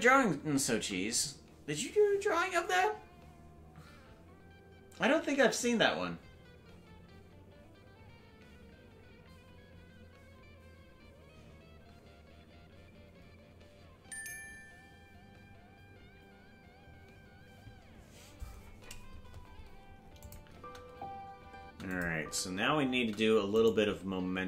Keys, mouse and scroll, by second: 20.2 click, 20.5 space, 21.9 click, 22.1 space, 23.6 right click.